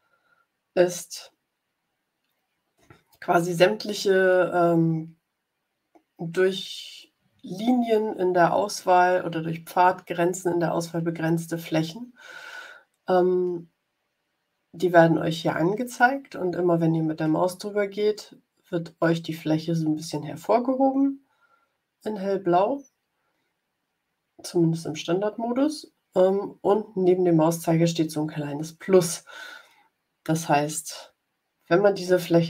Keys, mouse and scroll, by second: 0.0 ctrl+scroll up 2, 0.8 ctrl+scroll up 2, 2.2 ctrl+scroll down 2.